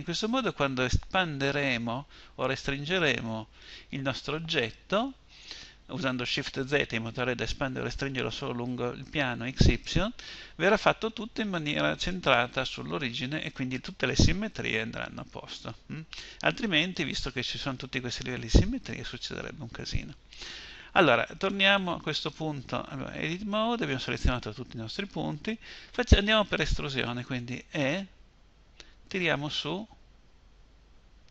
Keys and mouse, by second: 27.0 e.